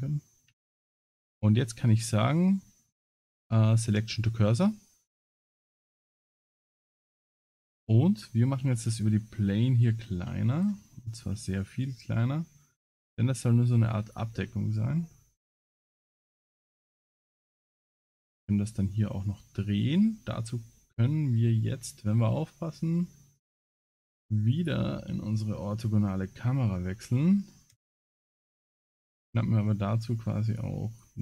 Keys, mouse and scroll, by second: 0.7 shift+s, 5.2 middle click, 6.0 KP_Decimal, 6.7 scroll down 2, 7.1 middle click, 8.6 s, 11.2 s, 14.4-14.8 scroll down 3, 14.8-15.4 scroll up 4, 16.9 r, 21.3 scroll down 5, 23.4 click, 24.6 click, 25.5 KP_0, 26.7-27.2 scroll up 3, 27.2 scroll down 3, 27.7 KP_0, 30.5 shift+click.